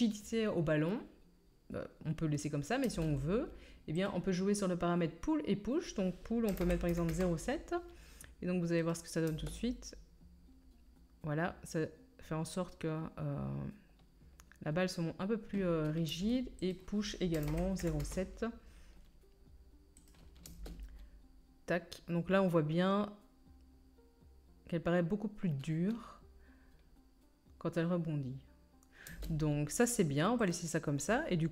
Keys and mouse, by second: 2.9 space, 9.3 space, 16.1 space, 20.5 space, 29.1 space, 29.9-31.5 drag, 29.9-31.5 right drag.